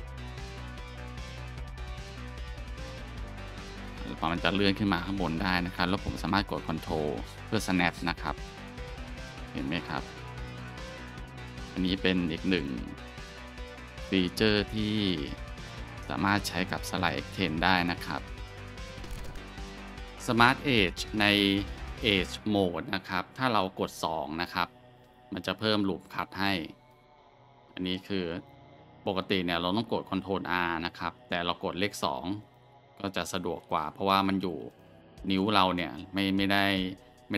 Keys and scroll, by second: 2.3 alt+shift+1, 24.9 2, 26.2-27.4 scroll, 29.9 ctrl+r, 30.7-31.9 scroll, 33.0 2, 36.7-37.3 scroll.